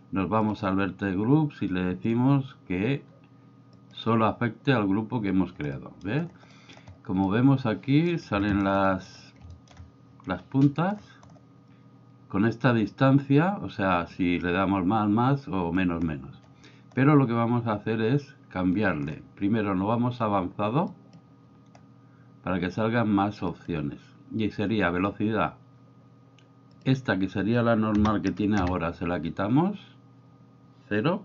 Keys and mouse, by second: 0.5 drag, 2.1-3.9 drag, 5.7-6.1 middle drag, 6.4 middle click, 7.2-8.1 middle drag, 8.4 shift+middle drag, 8.8 middle drag, 9.5 shift+middle click, 14.2-15.7 drag, 20.9 click, 23.5 click, 26.8-31.2 drag, 28.6 KP_Enter.